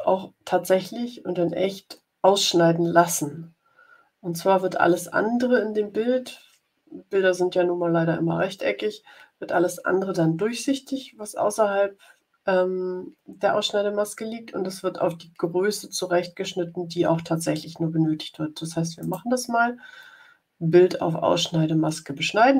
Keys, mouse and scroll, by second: 18.9 right click.